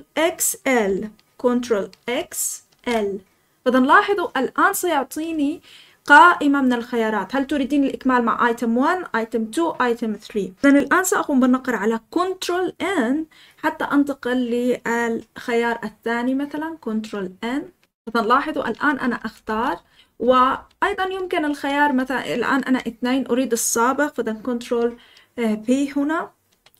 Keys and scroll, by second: 2.1 ctrl+x, 2.6 ctrl+x, 17.3 ctrl+n, 17.8 ctrl+n, 18.2 ctrl+n, 18.5 ctrl+n, 19.1-20.2 ctrl+n, 20.9 ctrl+n, 26.4 ctrl+p.